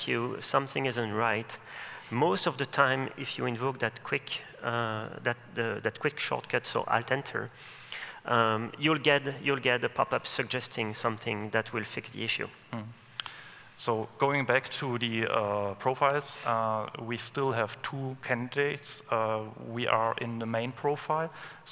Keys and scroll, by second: 13.9 ctrl+space, 14.8 ctrl+space.